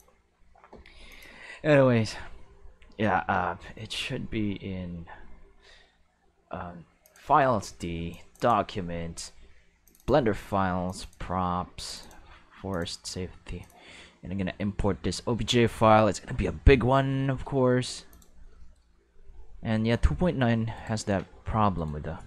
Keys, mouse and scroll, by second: 1.1 click, 7.0 click, 8.1 click, 9.8 click, 10.0 click, 10.8 click, 11.0 click, 11.8 click, 12.0 click, 12.7 click, 13.6-14.7 drag, 15.5-16.5 shift+middle drag, 17.2 middle click, 18.1 click, 20.7 right click, 21.7 right click.